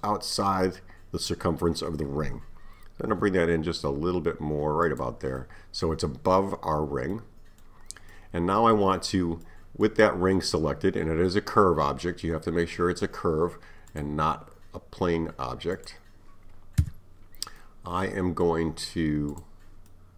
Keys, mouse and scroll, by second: 3.1 s, 5.4-12.5 middle drag, 13.9 click, 15.8 click, 16.9 Tab, 17.6-19.3 middle drag, 19.3 click, 19.9-20.1 middle drag.